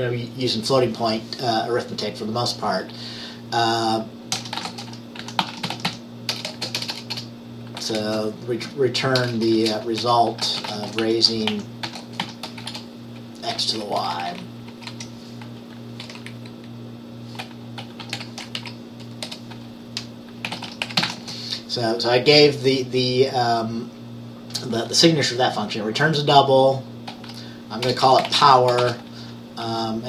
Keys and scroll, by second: 4.4-8.1 typing, 9.4-13.6 typing, 14.1 Left, 14.2 Left, 14.3 Left, 14.8 Left, 18.0-18.7 typing, 19.3 Return, 20.3-21.6 typing, 27.9-29.4 typing.